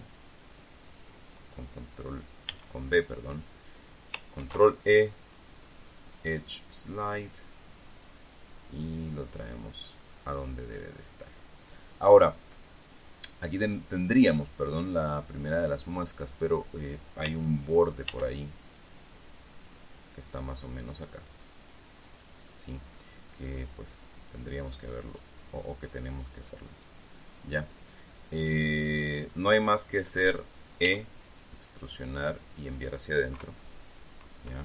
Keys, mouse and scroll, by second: 3.0 b, 3.2 click, 4.9 ctrl+e, 6.8 click, 10.9 click, 11.2-17.8 middle drag, 18.6 ctrl+r, 19.2 ctrl+click, 22.8 click, 25.6 click, 30.0 middle click, 31.4 e, 33.1 click, 33.9 KP_3.